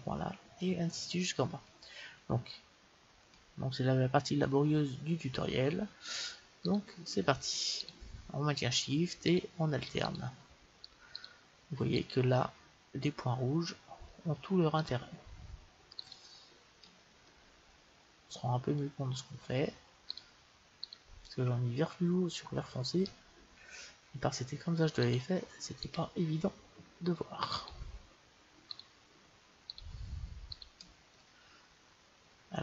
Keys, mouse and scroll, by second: 6.7-13.9 right drag, 14.8-18.0 right drag, 17.3 middle click, 18.0-19.1 middle drag, 20.1-22.8 right drag, 25.0-32.4 right drag, 31.2-32.6 middle drag.